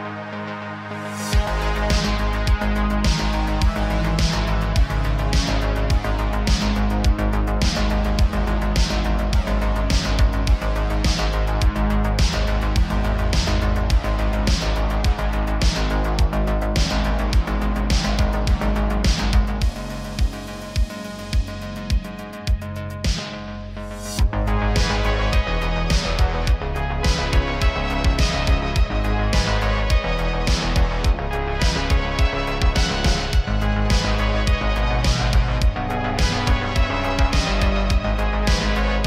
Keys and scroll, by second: 0.0 Tab, 4.3 g, 5.4 Tab, 7.1 Tab, 12.9 g, 13.9 g, 16.0 g, 16.6 Tab, 18.6 Tab, 21.1 g, 21.8 g, 24.3 ctrl+a, 25.2 Tab, 31.4 Tab, 31.8 e, 32.7 Tab, 33.0 shift+a, 35.6 g, 35.8 z.